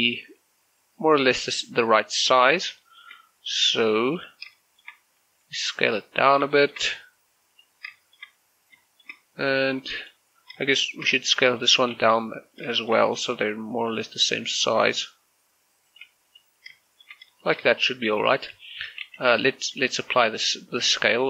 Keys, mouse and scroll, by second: 1.8 s, 2.6 click, 2.9 shift+middle click, 3.0 shift+scroll up 2, 3.5 s, 4.1 click, 4.3 scroll down 1, 4.6 shift+middle click, 5.3 s, 6.3 click, 6.6 shift+middle click, 6.9-7.2 scroll up 1, 7.2 s, 7.6 click, 7.9 scroll down 1, 8.1 shift+middle click, 8.9 shift+middle click, 9.7 s, 10.1 click, 10.4 scroll down 1, 10.7 shift+middle click, 11.3 right click, 11.7 shift+middle click, 12.0 g, 12.6 click, 12.8 shift+middle click, 13.0 scroll up 1, 13.3 s, 13.9 click, 14.1 g, 14.7 click, 15.0 s, 15.9 click, 16.1 g, 16.3 click, 16.6 scroll up 1, 16.9 shift+middle click, 17.5 shift+right click, 17.6 shift+middle click, 18.2 s, 18.5 click, 18.7 shift+middle click, 19.3 ctrl+z, 19.6 shift+middle click, 19.9-20.6 scroll up 2, 20.6 scroll down 2, 20.9 shift+middle click.